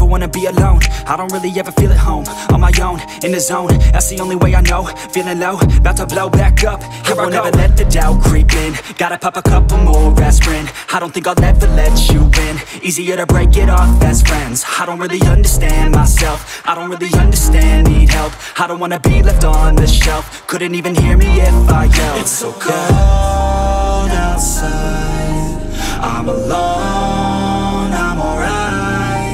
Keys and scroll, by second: 4.0 alt+w, 4.5 z, 6.1 alt+z.